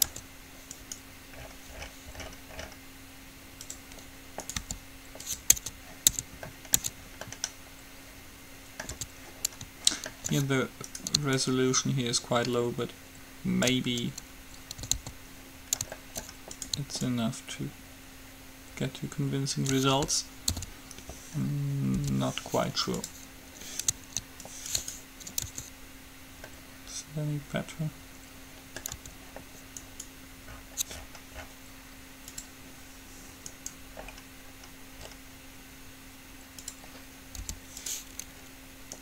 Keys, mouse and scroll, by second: 0.3 Tab, 0.9-2.8 right drag, 4.7-6.3 right drag, 4.8 g, 5.8 Tab, 6.3 Tab, 7.0 Tab, 9.1 Tab, 9.4 click, 9.4 right click, 11.1-13.0 right drag, 11.5-13.3 drag, 15.0 a, 15.1 a, 15.7 middle click, 16.1 middle click, 16.8-19.1 drag, 16.8-18.3 right drag, 20.8 alt+p, 22.2 u, 24.6-26.3 right drag, 25.6 Tab, 26.6-28.6 middle drag, 29.3 Tab, 30.0-31.8 right drag, 33.8-35.6 right drag, 37.6 u.